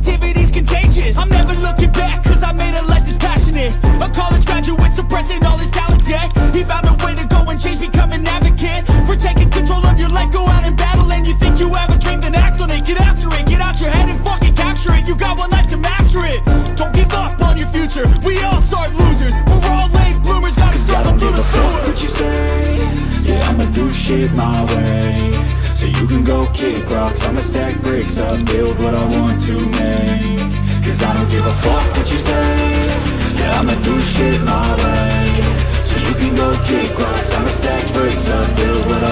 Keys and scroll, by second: 8.2 ], 8.3 ], 8.5 ], 9.5 ].